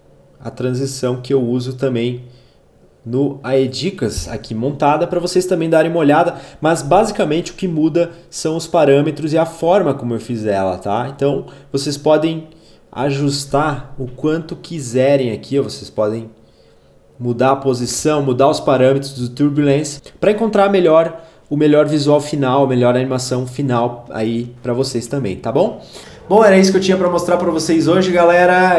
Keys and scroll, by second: 16.5 ctrl+z.